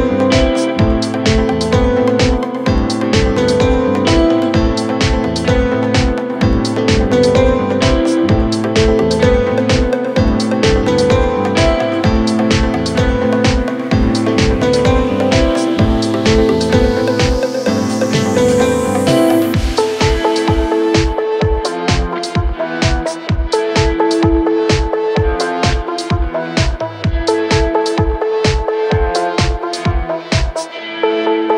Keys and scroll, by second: 8.6 Caps_Lock, 9.5-12.7 typing, 9.9 Caps_Lock.